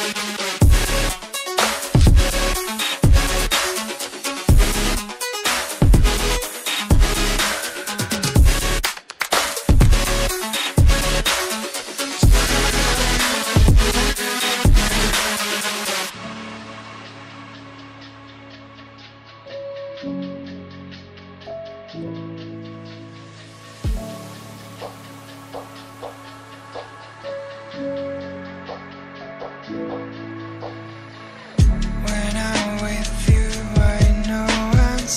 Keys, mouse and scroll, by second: 1.3 click, 4.4 double click, 5.5 click, 5.8 double click, 6.5 click, 10.2 double click, 11.0 click, 11.1 double click, 14.7 click, 16.0 double click, 16.4 click, 20.7 right click, 22.1 click, 25.9 click.